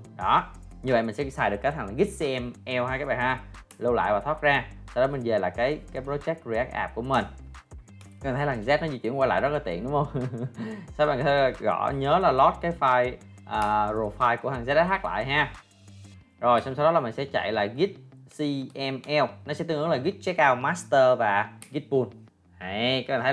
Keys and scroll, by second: 8.0 ctrl+l, 16.6 ctrl+l.